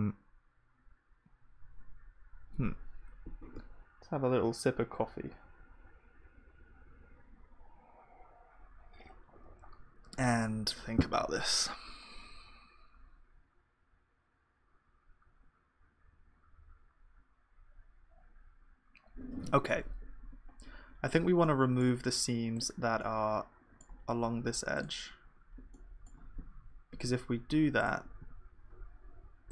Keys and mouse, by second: 20.5-27.8 middle drag, 27.8 ctrl+e, 28.2 a, 29.1 u.